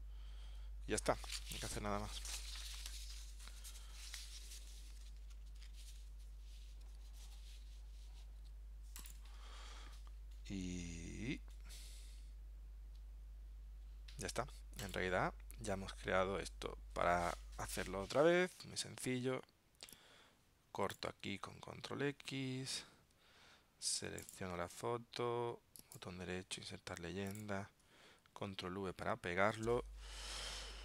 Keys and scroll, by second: 22.9 super+x, 28.6 super+v.